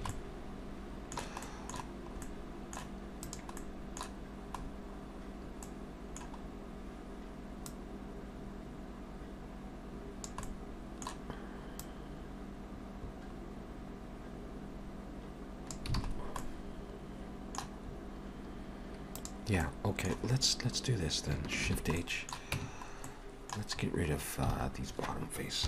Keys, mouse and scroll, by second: 0.0 alt+a, 0.1 middle click, 1.4 middle click, 1.9-2.9 scroll down 2, 2.3 middle click, 3.3 click, 3.6 middle click, 4.7-5.3 scroll down 1, 5.3-5.7 scroll down 2, 5.7 middle click, 6.4 scroll up 2, 7.7 click, 10.5 middle click, 11.9 click, 16.0 alt+a, 16.2-17.1 scroll down 3, 16.4 middle click, 17.9 scroll up 2, 19.2 click, 19.2 scroll up 1, 19.6 middle click, 21.6 shift+h, 22.0 middle click, 22.6 Tab, 23.1 middle click, 23.8-24.6 scroll up 6, 24.6 alt+a.